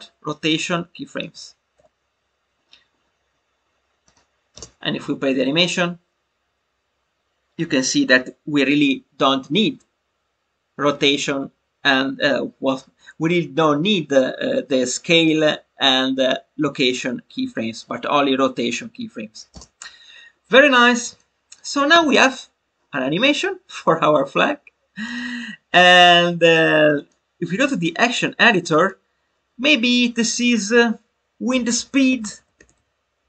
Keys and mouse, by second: 4.0 click, 21.1 click, 25.0-27.0 drag, 28.7-33.2 drag.